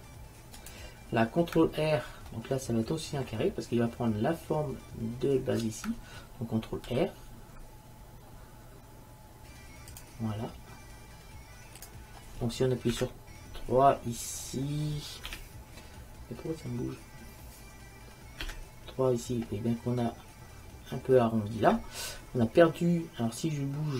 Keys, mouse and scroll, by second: 2.5 click, 7.0 ctrl+r, 11.4-13.0 drag, 13.0 KP_3, 15.4 KP_3, 18.4-18.9 scroll up 1.